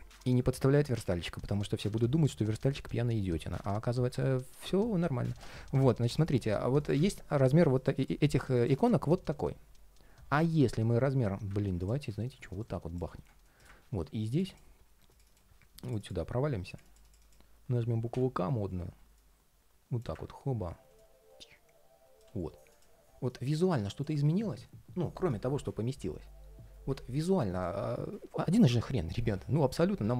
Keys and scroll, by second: 3.8 ctrl+shift+3, 5.1 ctrl+shift+3, 18.4 ctrl+shift+4, 23.9 ctrl+shift+4.